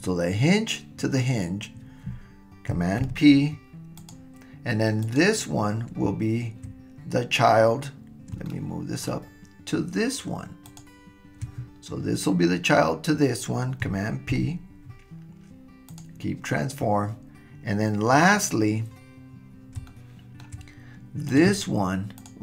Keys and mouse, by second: 3.0 super+p, 5.0 click, 8.5 shift+click, 8.5-9.2 shift+middle drag, 10.7 shift+click, 14.3 super+p, 19.9-20.5 shift+middle drag, 22.2 click.